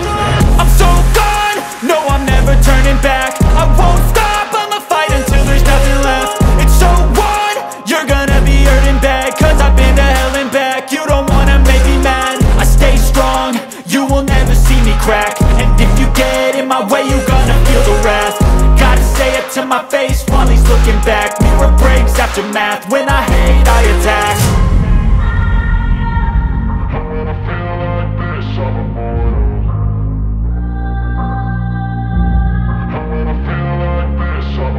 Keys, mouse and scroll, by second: 0.2 x, 3.3 click, 4.5 g, 5.0 x, 20.5 click, 23.0 click, 26.2 g, 26.6 x, 34.2-34.7 drag.